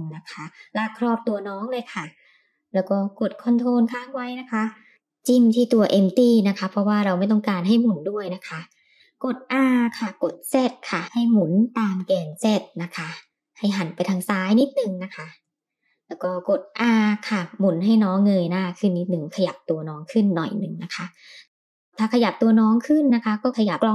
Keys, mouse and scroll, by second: 5.0 ctrl+click, 6.9 r, 16.0 r, 18.3 g, 21.2 click, 22.5 g.